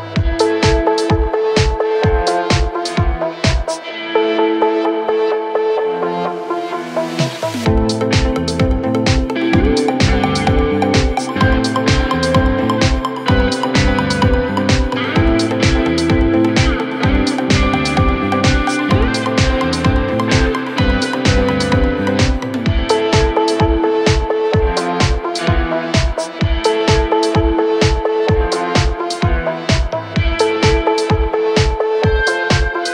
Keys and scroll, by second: 23.2 y.